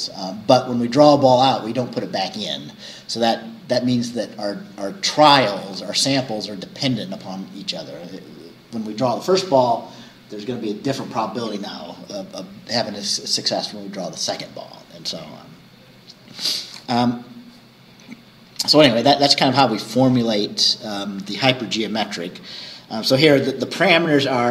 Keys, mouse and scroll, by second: 22.1 scroll down 2.